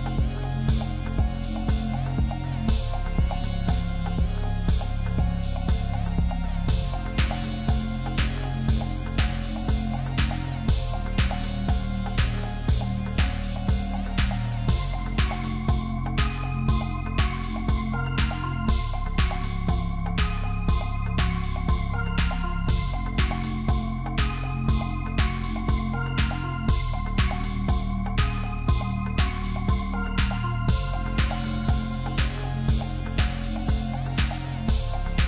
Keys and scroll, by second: 6.8 ctrl+c, 7.3 ctrl+f, 16.8 ctrl+-.